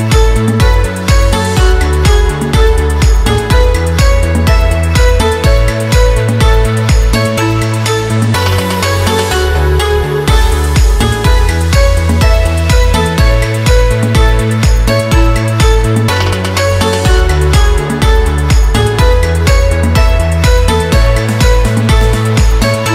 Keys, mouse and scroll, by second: 0.7-2.1 drag, 2.1 Down, 4.9 scroll down 1, 5.6 scroll up 1, 8.6 click, 10.6 shift+click, 11.9 shift+click, 14.0 shift+Up, 15.6 shift+Down, 17.3 scroll up 1, 17.8 click, 18.3 scroll up 1, 19.8-22.3 drag.